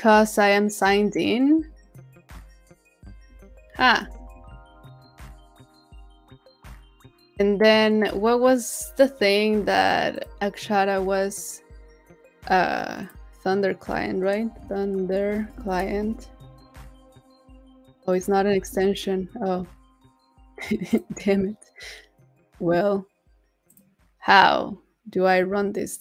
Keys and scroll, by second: 3.3 super+w, 4.1 super+w, 18.5 super+a.